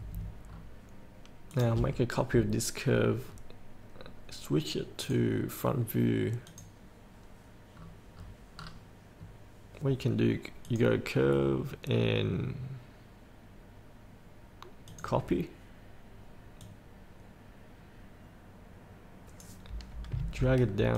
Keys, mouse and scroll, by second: 0.7-1.7 scroll down 1, 1.7 click, 3.4 scroll up 1, 5.2 click, 7.9-8.8 scroll down 1, 9.4-10.8 scroll down 1, 10.8-19.9 drag.